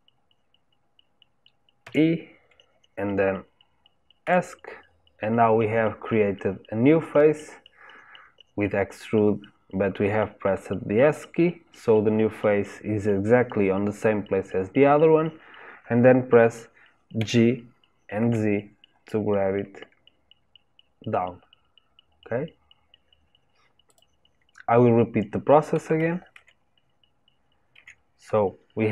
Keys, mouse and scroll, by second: 17.1 g, 25.9 ctrl+z, 26.3 ctrl+z.